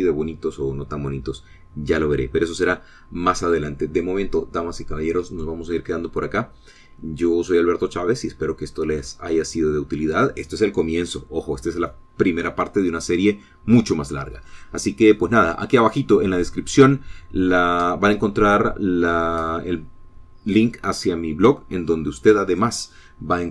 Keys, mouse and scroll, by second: 4.0-5.9 middle drag, 8.0-8.7 scroll down 2, 8.8 scroll down 2, 9.0-9.6 scroll up 2, 10.3-10.8 scroll up 4, 11.2-11.8 scroll down 2.